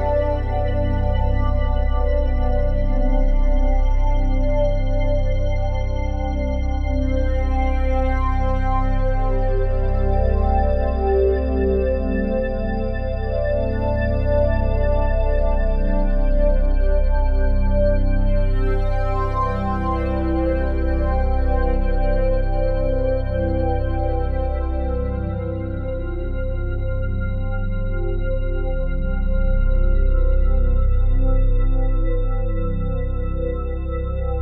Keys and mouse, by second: 0.6-2.4 drag, 3.0 click, 3.7 click, 8.0 click, 9.0 click, 9.9-12.3 drag, 13.6-16.3 drag, 17.2-17.8 ctrl+alt+drag, 18.1 alt+shift+click, 18.8 ctrl+alt+click, 19.3 alt+shift+click, 19.7 ctrl+alt+click, 21.4 click, 21.8-29.3 drag, 31.3 click, 32.1 click, 33.1 click, 34.0-34.4 drag.